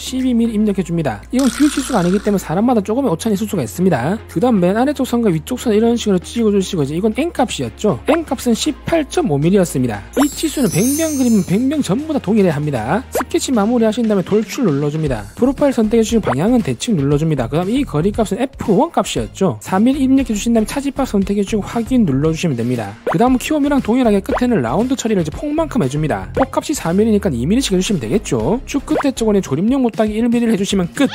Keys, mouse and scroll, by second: 0.0-0.9 typing, 5.0 click, 6.2 drag, 7.0 click, 9.7 click, 14.5 e, 15.9 click, 17.5 click, 18.6 click, 21.3 click, 22.2 click, 23.3 click, 24.0 click, 25.2 click, 27.2 click, 29.7 1, 30.7 click.